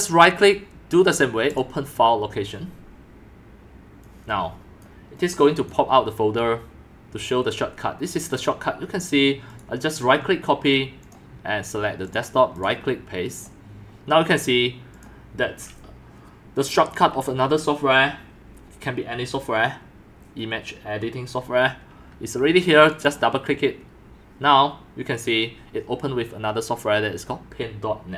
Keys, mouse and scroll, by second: 1.6-5.2 drag, 5.3 click, 5.6-12.0 drag, 12.2-12.8 drag, 13.4-19.8 drag, 20.1 click, 23.0-24.7 drag, 24.7 click, 24.9 click, 25.2 click, 25.5 click, 25.7 click.